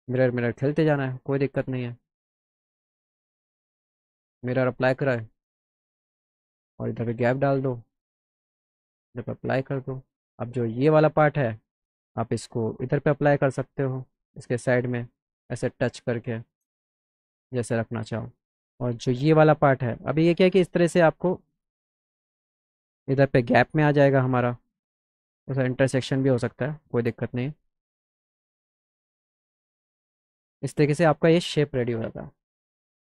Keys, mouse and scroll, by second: 1.4 click, 2.9 click, 4.3 click, 6.0 click, 7.1-10.2 drag, 10.2 click, 12.2 shift+click, 15.3-16.5 shift+drag, 18.8 click, 20.0 middle click, 20.5 middle click, 21.7-24.5 shift+drag, 28.3 click, 29.7 middle click, 30.3 click, 30.9 click, 32.8 middle click.